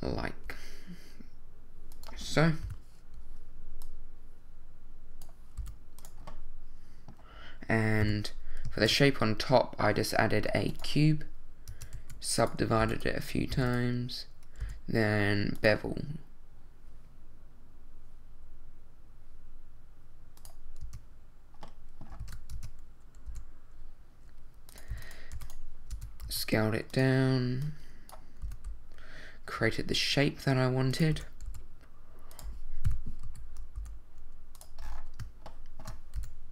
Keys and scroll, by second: 2.6 |, 5.6 s, 8.0 i, 8.8 shift+a, 11.7 Tab, 12.0 w, 14.6 w, 20.8 Tab, 22.2 super+z, 22.5 super+Tab, 23.3 w, 24.9 w, 25.9 Tab, 26.2 s, 28.4 s, 29.6 x, 31.1 s, 31.5 y, 33.2 z, 33.8 g, 36.2 shift+s.